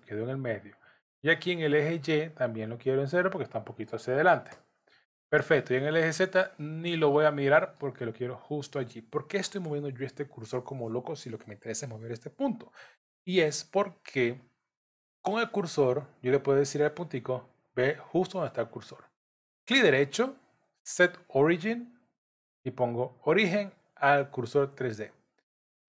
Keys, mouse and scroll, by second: 2.7 click, 6.6 middle click, 13.8 Tab, 19.8 right click.